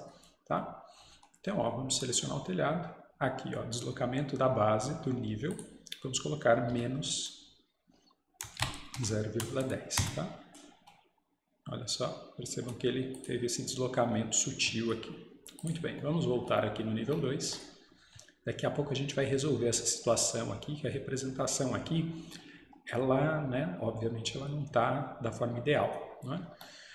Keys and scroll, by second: 6.7 -, 8.4-10.0 typing, 11.8 typing.